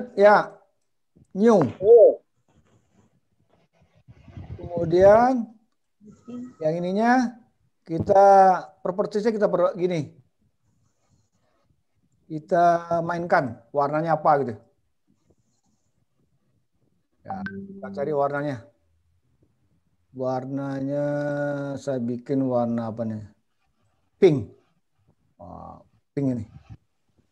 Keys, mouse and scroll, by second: 0.8 click.